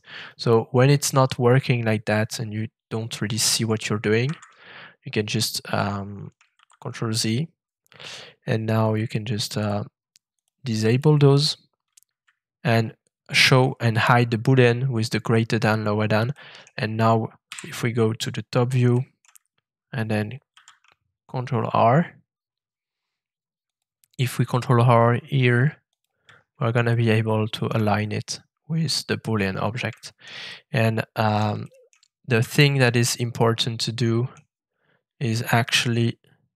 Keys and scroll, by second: 4.2 Escape, 6.5 ctrl+z, 11.9 <, 17.4 7, 20.5 ctrl+shift+r.